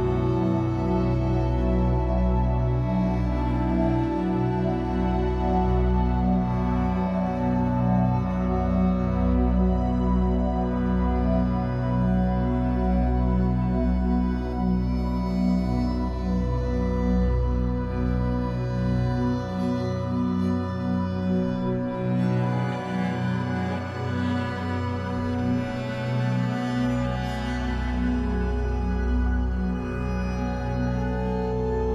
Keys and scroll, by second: 10.7 Escape, 11.1 3, 12.0 shift+Tab, 12.4 Escape, 15.4 ctrl+z, 17.1 Escape, 17.4 3, 18.1 shift+Tab, 18.8 2, 19.6 alt+c, 22.9 b, 25.9 Escape, 26.4 3.